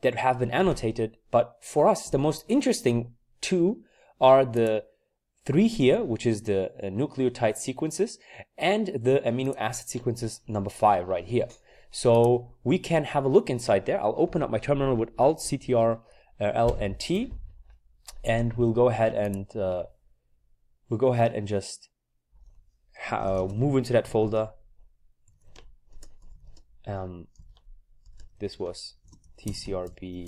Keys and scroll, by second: 16.7 ctrl+alt+t, 23.0-30.2 typing.